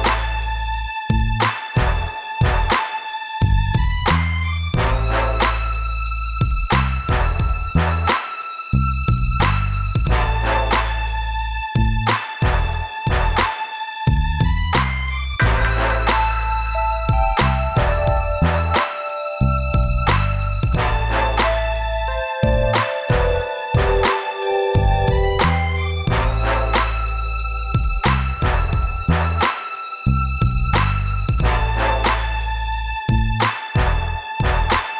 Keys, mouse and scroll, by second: 0.7 click, 0.7 click, 1.4 middle click, 4.1 scroll up 2, 5.3-5.6 scroll down 2, 6.6 click, 6.7 click, 8.4 click, 13.1 scroll up 2, 14.2 scroll down 2, 15.3 click, 16.1 middle click, 17.1 scroll up 1, 18.9 click, 19.0 click, 19.8 click, 19.9 click, 20.6 click, 21.5 scroll up 2, 25.4 click, 25.5 click, 31.3 middle click.